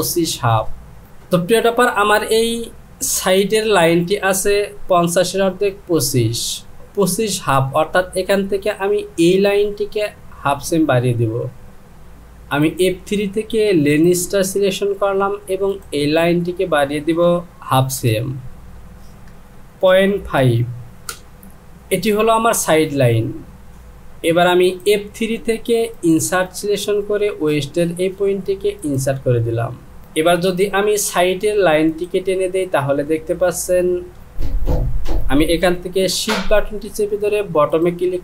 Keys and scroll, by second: 19.5 Down, 19.9 KP_Decimal, 20.4 KP_5, 21.1 Return, 34.9 ctrl+z.